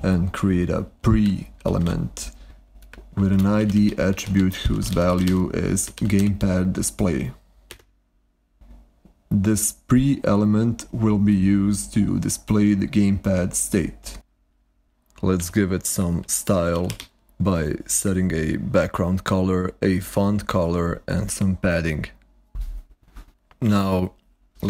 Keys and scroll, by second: 0.0-6.0 typing, 5.8 ctrl+y, 7.6 Escape, 15.3-17.3 typing, 18.1 ctrl+y.